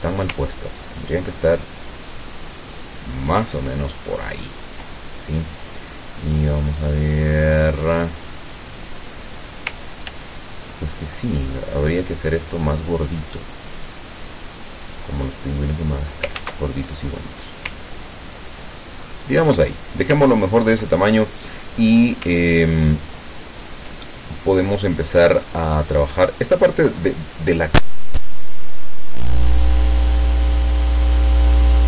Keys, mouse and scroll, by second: 0.5-4.9 ctrl+shift+drag, 6.5 click, 8.5-9.9 drag, 10.1 ctrl+z, 11.7 click, 13.5 click, 14.3-16.3 drag, 16.4 ctrl+z, 18.0-20.0 ctrl+drag, 20.3-20.6 ctrl+scroll down 2, 22.5 ctrl+scroll up 2, 23.5 ctrl+scroll down 2, 24.1-25.7 ctrl+drag, 26.2 click.